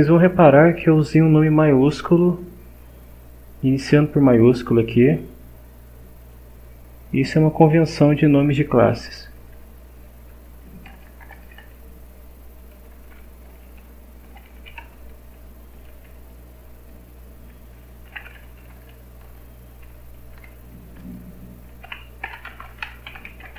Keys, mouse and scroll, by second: 2.0 click, 4.7 click, 6.2 click, 10.0 Down, 10.3 Up, 10.9 Return, 11.4 Up, 14.0-15.2 typing, 17.8-19.1 typing, 20.3-23.5 typing.